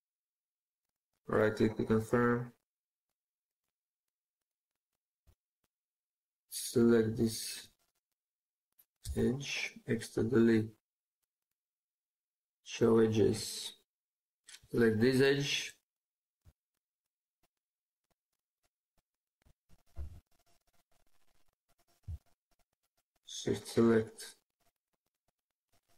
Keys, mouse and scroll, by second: 3.2 middle click, 8.9 x, 11.3 right click, 16.3 shift+click, 17.3 shift+click, 18.3 shift+click, 19.8 ctrl+z, 22.0 shift+click, 23.3 shift+click, 24.6 shift+click, 25.6 shift+click.